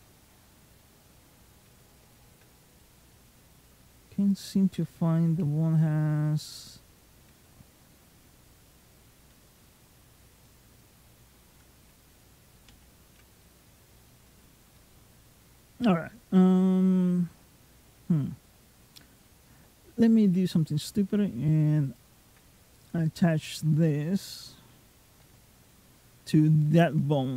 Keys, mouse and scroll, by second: 2.6 middle click, 4.2 ctrl+click, 5.1 f, 7.0 g, 9.2 click, 10.3 middle click, 12.6 ctrl+z, 13.2 middle click, 13.8 scroll down 1, 14.5 scroll down 1, 14.6 middle click, 15.7-16.2 scroll down 2, 16.2 middle click, 21.8 ctrl+click, 22.7 middle click.